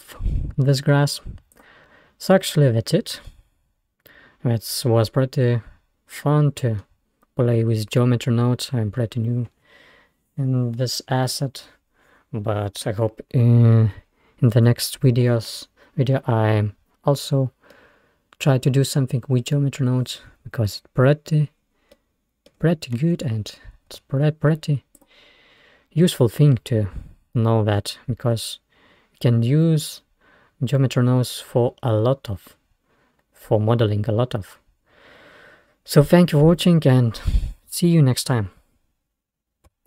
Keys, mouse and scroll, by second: 1.7 click, 2.3-3.1 scroll down 4, 3.3 scroll down 1, 3.3-6.0 middle drag, 17.8-20.5 middle drag, 20.9-21.5 scroll up 2, 21.5-22.0 scroll up 3, 22.0 middle click, 22.6-23.4 scroll down 4, 23.4 scroll down 2, 24.0 Tab, 25.0 click, 27.4-30.1 middle drag.